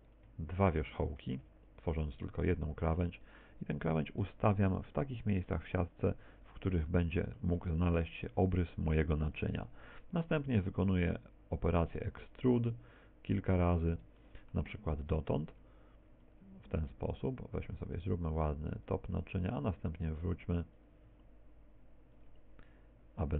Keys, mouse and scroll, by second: 0.0 right click, 0.6 shift+right click, 1.5 x, 3.3 right click, 3.8 g, 6.4 ctrl+click, 6.4-7.0 scroll up 1, 7.0 shift+middle click, 7.0-7.6 scroll up 4, 8.3 right click, 8.4 g, 9.5 ctrl+click, 9.9-12.8 typing, 10.4 click, 12.5 click, 14.0 click, 14.2 shift+middle click, 15.0-21.1 typing, 15.6 click, 17.2 click, 18.4 click, 19.0 click, 20.0 click, 20.9 click.